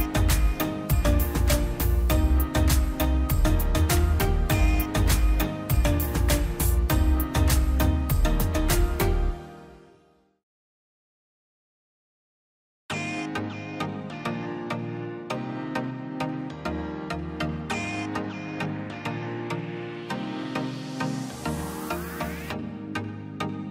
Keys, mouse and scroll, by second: 0.4 click, 0.6 scroll down 1, 1.5 middle click, 1.9-2.6 scroll up 1, 3.2 click, 3.6-3.9 scroll up 1, 3.9 click, 4.1-5.1 scroll down 1, 5.1 click, 5.3-6.0 scroll down 1, 7.1 click, 10.3 click, 11.3-12.0 scroll up 1, 12.0 click, 12.2 scroll down 1, 12.9 click, 17.9 click, 19.2-19.9 scroll down 1, 19.9 middle click, 20.0 scroll down 1, 20.3 middle click, 20.8-21.1 scroll, 21.7 click, 21.8-22.6 scroll down 1, 23.1 click, 23.3-23.7 scroll up 1.